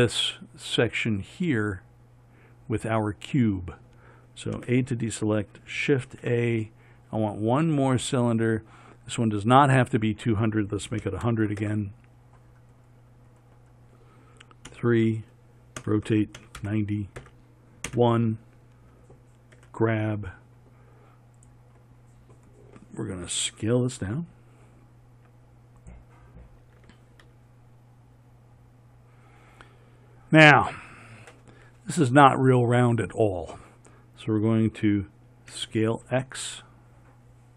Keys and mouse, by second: 4.8 a, 6.3 shift+a, 11.7 KP_0, 16.0 KP_3, 16.0 r, 19.8 g, 24.4 s, 27.5 g, 35.8 s.